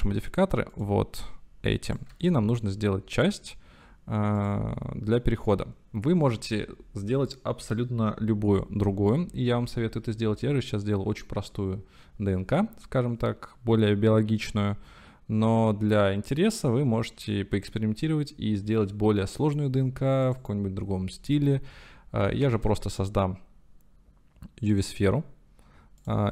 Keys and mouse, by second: 1.9 middle click, 2.2-3.2 shift+drag, 4.5 click, 20.3-21.5 drag, 22.5 shift+a.